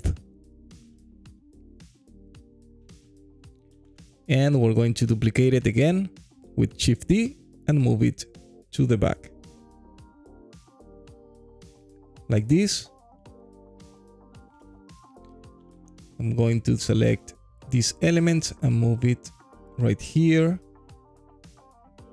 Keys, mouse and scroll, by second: 1.2-3.6 alt+drag, 6.3 shift+d, 8.8 y, 12.3 click, 12.8-15.3 alt+drag, 15.5 click, 16.1 shift+click, 16.5 shift+click, 17.6 g, 17.8 y, 20.0 click, 20.6-21.9 alt+drag, 21.9 alt+middle click, 22.0 scroll down 2.